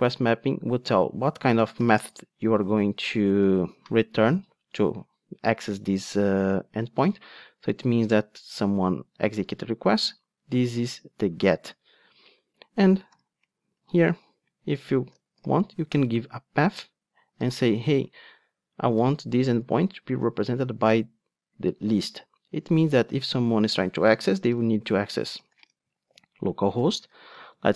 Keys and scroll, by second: 16.0 Return, 23.7 Tab.